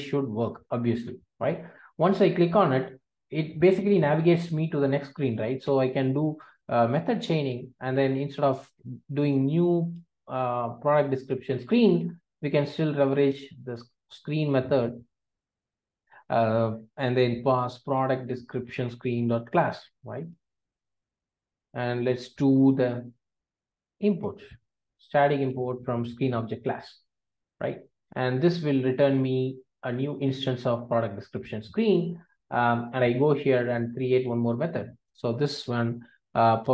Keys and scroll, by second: 18.9 Return, 20.4 Return, 21.1 Return, 25.6 alt+Return, 28.3 alt+Return, 36.6 Return.